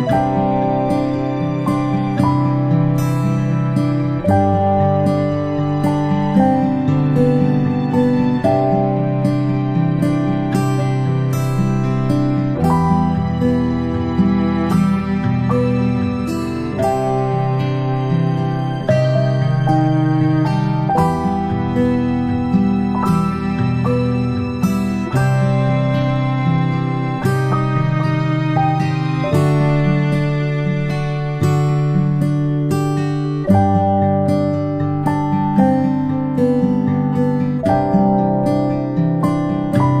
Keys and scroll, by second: 16.3-16.7 ctrl+space, 21.1 ctrl+z, 27.7 space, 27.8 space, 27.9-29.5 space, 31.8 ctrl+z, 32.0 ctrl+z, 34.9 space, 35.1-40.0 space, 35.5 a, 37.5 Delete, 38.2 Delete.